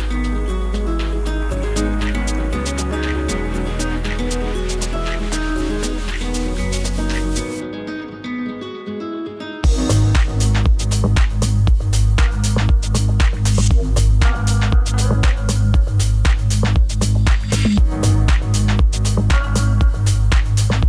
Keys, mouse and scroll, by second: 15.6-20.8 drag.